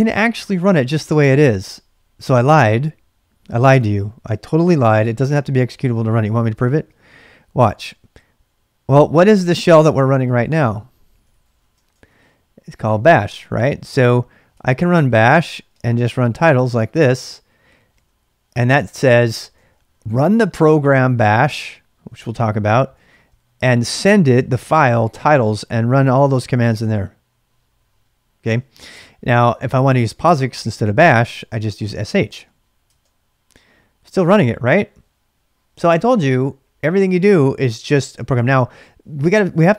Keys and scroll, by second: 10.0-11.6 typing, 11.9 Return, 14.3-18.4 typing, 19.5-20.3 typing, 22.7-23.7 typing, 28.5 ctrl+[, 28.6-31.8 typing, 32.8 Return.